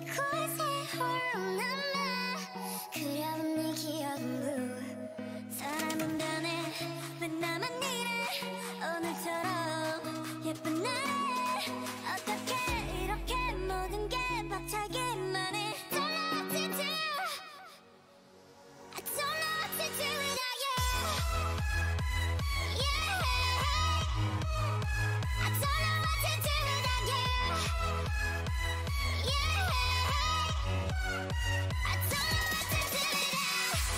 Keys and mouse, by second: 0.9 ctrl+r, 1.9 ctrl+e, 7.2-11.0 right drag, 10.7 ctrl+e, 11.3 a, 12.6-13.9 drag, 13.5 g, 14.4 o, 14.8 g, 16.7 Tab, 18.2 Tab, 18.7-20.9 drag, 19.4 g, 20.8 Tab, 28.1 Tab, 29.6-31.3 drag, 29.9 x, 30.6 x.